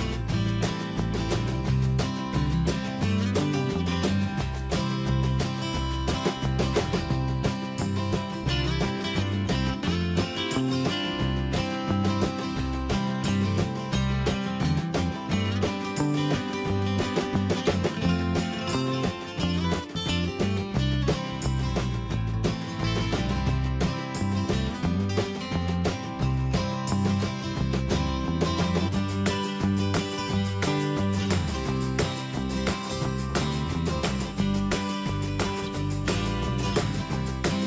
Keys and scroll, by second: 7.0 ctrl+t, 10.3 Return, 12.9 ctrl+space, 21.4 ctrl+alt+c, 25.0 Return, 34.9 ctrl+z.